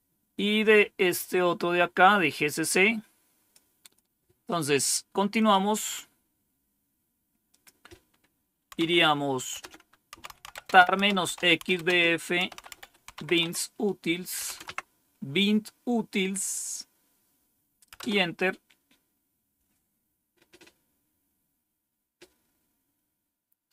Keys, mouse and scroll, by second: 2.2-3.5 drag, 3.8 click, 5.3 click, 7.4 click, 8.7 c, 9.8-14.3 typing, 14.5 Tab, 17.9 Return.